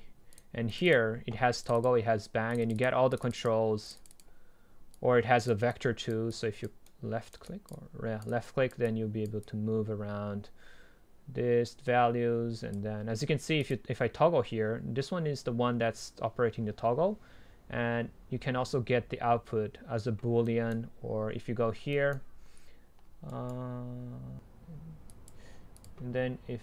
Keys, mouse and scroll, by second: 1.3-5.5 drag, 15.9 click, 20.6-24.3 right drag, 24.3 drag, 24.6 middle click, 25.3-26.6 drag.